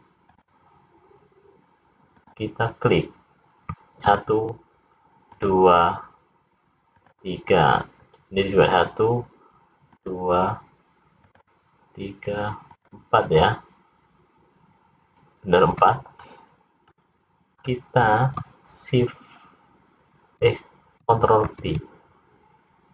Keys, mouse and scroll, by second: 1.1 click, 2.3 click, 4.2 shift+click, 4.4 shift+click, 9.3 shift+click, 16.3 middle click, 22.2 ctrl+b.